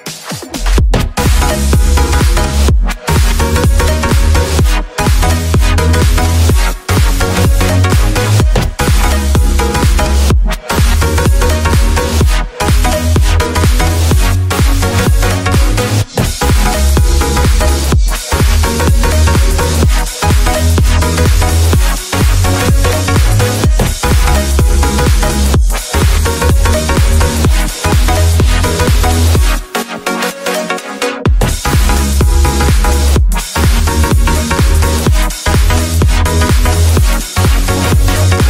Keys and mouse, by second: 1.2 ctrl+alt+KP_0, 2.3-2.8 shift+middle drag, 3.5 q, 5.8 n, 7.0 click, 10.0 click, 10.9 n, 11.6 q, 14.0 shift+click, 14.3 shift+click, 14.5 ctrl+drag, 14.7 shift+click, 15.0 ctrl+middle drag, 15.2 middle click, 15.3 shift+middle click, 15.4 middle drag, 16.4 click, 16.7 click, 17.3 Tab, 17.4 s, 17.9 Tab, 18.0 ctrl+s, 18.4 a, 18.5 shift+click, 18.9 ctrl+s, 19.0 q, 19.3 q, 20.8 click, 21.8-25.3 drag, 26.0 ctrl+s, 26.3 a, 26.5 a, 27.1 click, 27.5 Tab, 28.5 2, 29.1 click, 30.0 shift+click, 31.0 e, 34.7 right click, 35.0 shift+right click, 35.3 shift+right click, 36.2 ctrl+b.